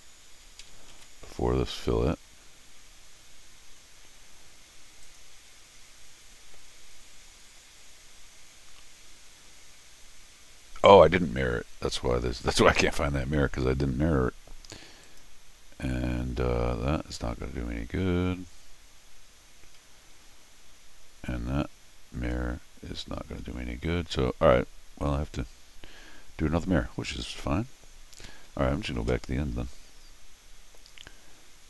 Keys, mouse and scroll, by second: 0.9 ctrl+alt+r, 5.0 click, 15.0 click, 20.1 Escape, 22.4-23.1 scroll down 2, 28.9 ctrl+alt+shift+r.